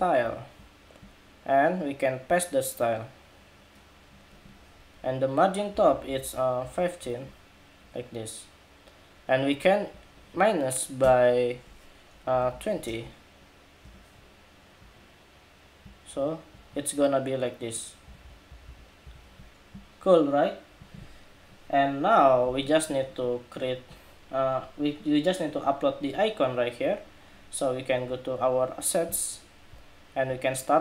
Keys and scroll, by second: 5.8 alt+Down, 5.9 alt+Down, 7.7 alt+Down, 17.8 alt+Up, 18.2 alt+Up, 18.4 alt+Up, 19.3 alt+Up.